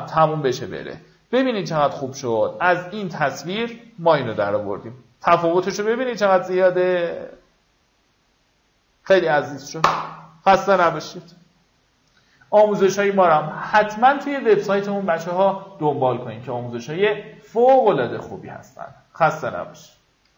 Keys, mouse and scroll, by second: 1.2-1.5 scroll down 1, 2.7 alt+click, 3.8 alt+click, 4.9 alt+click, 5.4 alt+click, 5.9 alt+click, 6.3 alt+click, 7.3 alt+click, 7.6 alt+click, 8.2 alt+click, 8.6 alt+click.